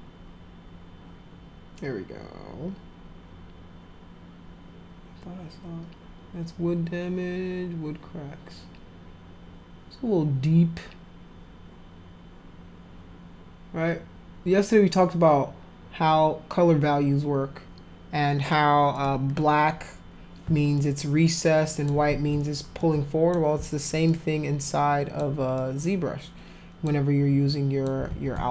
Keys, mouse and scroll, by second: 18.9 click, 20.8-21.9 alt+drag, 22.1 ctrl+z, 22.8 alt+click, 24.1-25.2 alt+drag, 25.6-26.9 alt+drag, 27.5 alt+click, 28.1 ctrl+z.